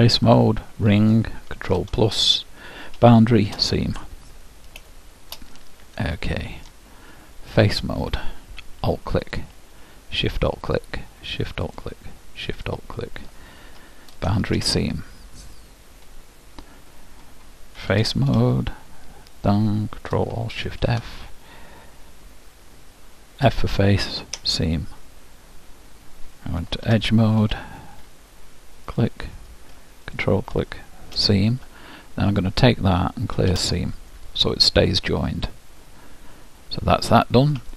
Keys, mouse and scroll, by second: 1.8 ctrl+KP_Add, 3.1 shift+', 5.0-7.6 middle drag, 7.8-14.4 drag, 14.4 shift+', 15.7-17.4 middle drag, 18.0 ctrl+Tab, 19.5-21.3 drag, 23.6 ctrl+alt+shift+f, 26.8 ctrl+Tab, 29.0-31.8 drag, 32.4-34.2 drag, 35.2 middle click.